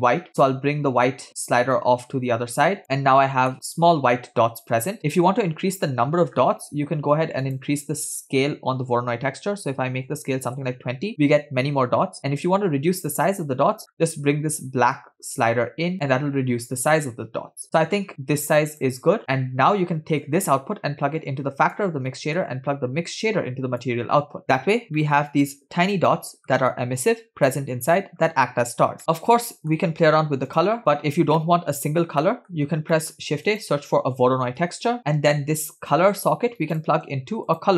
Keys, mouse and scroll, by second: 0.4 click, 0.7 click, 1.8 click, 2.8 click, 3.4 scroll down 1, 3.5-5.2 middle drag, 6.3-7.5 scroll up 2, 7.5-10.6 drag, 12.3-13.4 middle drag, 13.8-15.0 scroll up 4, 15.0 click, 19.2 middle click, 19.2 scroll down 3, 20.3-21.8 drag, 22.1 middle click, 23.2-24.1 drag, 25.1-26.7 middle drag, 27.6-28.6 middle drag, 29.0 middle drag, 29.5 middle click, 29.8-30.5 scroll up 2, 30.6 click, 31.4 middle click, 32.3 middle click, 33.0 middle click, 33.3 shift+a, 35.0 click, 35.1 middle click, 36.0-36.8 drag, 37.2 shift+a.